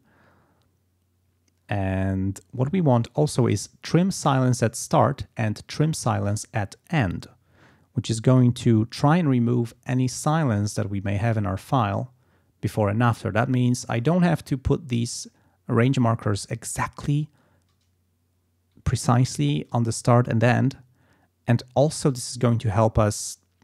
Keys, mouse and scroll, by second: 4.2 click, 5.8 click, 8.3 click, 13.5 click.